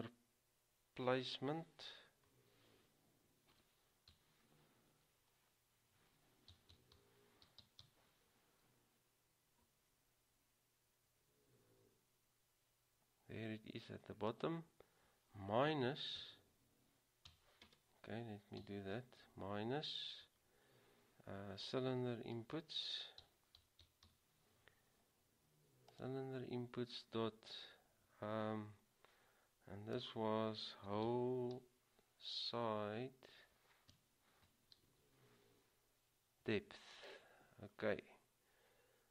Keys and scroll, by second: 3.6-4.3 typing, 7.8 typing, 16.3 typing, 23.1-24.8 typing, 30.3-31.7 typing, 34.1-35.0 typing.